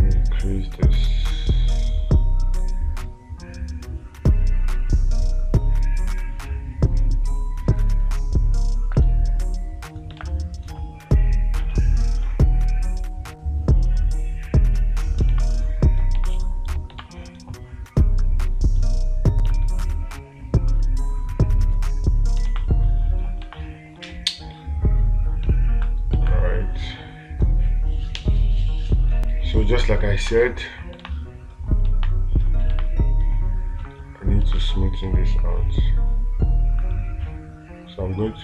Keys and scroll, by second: 10.7 space, 15.8 space, 17.5 space, 22.9 space, 26.6 space, 30.7 space, 31.5 space, 33.2 space, 34.9 space.